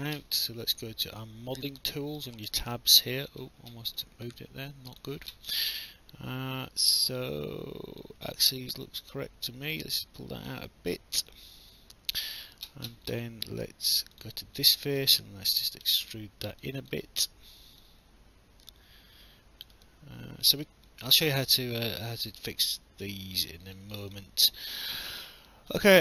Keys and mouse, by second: 1.7 click, 4.9 click, 6.8 alt+click, 10.7 alt+click, 14.1 click, 15.5 click, 16.6 alt+click, 17.8 click, 19.8 alt+click, 22.3 alt+click, 24.1 alt+click, 25.1 alt+middle click, 25.5 alt+click.